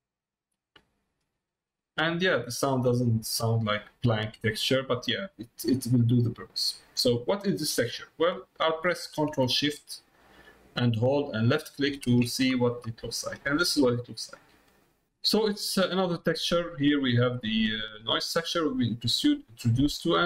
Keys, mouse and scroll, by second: 3.2 middle click, 4.7 middle click, 5.4 middle click, 5.8 middle click, 7.0 middle click, 13.4 middle click, 14.4 middle click, 15.5 middle click, 16.3 middle click, 17.4 middle click, 18.0 middle click, 18.9 middle click, 19.6 middle click, 19.9 middle click.